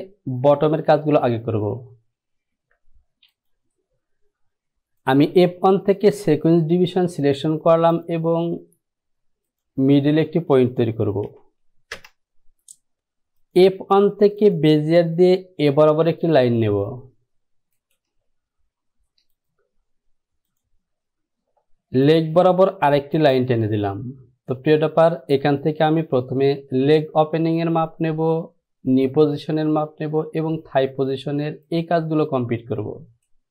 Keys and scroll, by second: 11.4 KP_2, 12.1 Return.